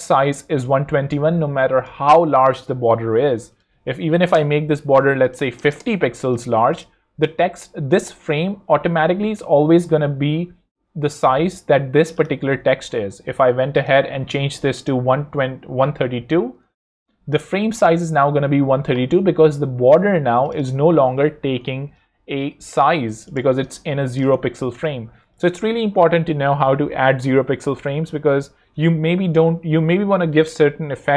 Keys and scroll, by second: 4.1 i, 4.3 Return, 5.2-6.1 typing, 8.5 alt+super+l, 15.0-16.9 typing, 21.4 shift+super+n, 21.6-23.0 typing, 23.4 alt+z, 23.7 alt+space, 24.4 super+space, 24.5 super+z.